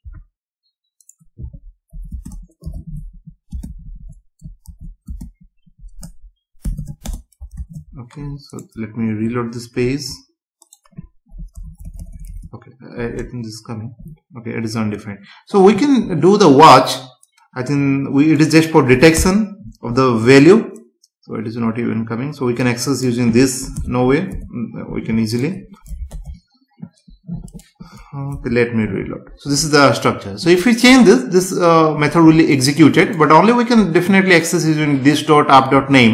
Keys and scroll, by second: 1.9 Right, 2.1 space, 3.7 Left, 5.1 space, 7.0 space, 7.6 ctrl+s, 9.8 F5, 11.6 BackSpace, 19.1 BackSpace, 23.8 BackSpace, 26.1 ctrl+s, 28.3 F5.